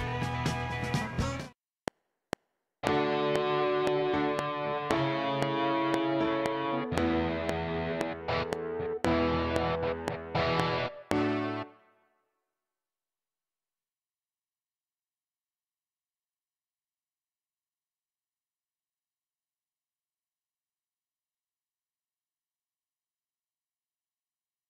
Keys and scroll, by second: 1.2 space, 1.7 F7, 11.5 space.